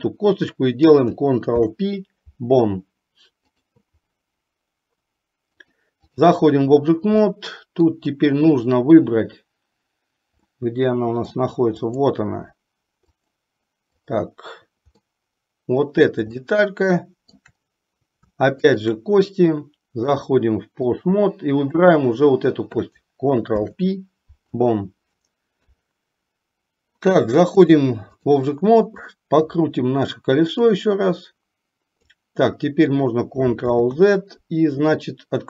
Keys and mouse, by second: 1.6 ctrl+p, 5.6-6.5 drag, 7.4-8.2 middle drag, 10.7-11.6 middle drag, 14.2 click, 15.2-16.3 middle drag, 16.6-17.6 shift+middle drag, 18.7 shift+click, 20.2-21.3 drag, 21.7 click, 23.6 ctrl+p, 25.8 KP_3, 27.8-28.5 drag, 31.0-32.5 drag, 33.7 ctrl+click.